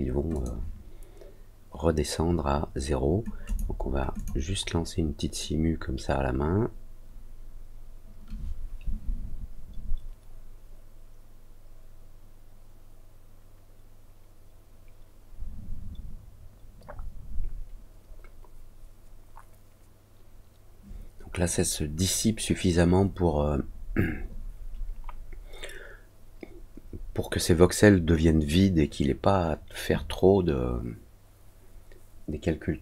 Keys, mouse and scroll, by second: 0.3 click, 3.4 click, 4.1 click.